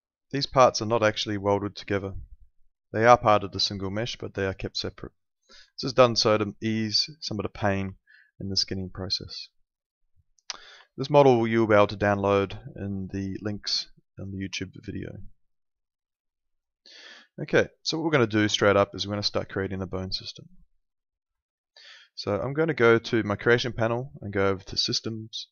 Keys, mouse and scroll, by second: 1.1 alt+middle click, 2.0 click, 2.5 alt+middle click, 3.4 alt+middle click, 4.0 click, 4.5 alt+middle click, 5.7 alt+middle click, 7.9 alt+middle click, 10.8 alt+middle click, 16.1 alt+middle click, 16.9 click, 17.5 alt+middle click, 18.6 alt+middle click, 19.2 alt+middle click, 20.6 alt+middle click, 21.6 alt+middle click, 23.1 click.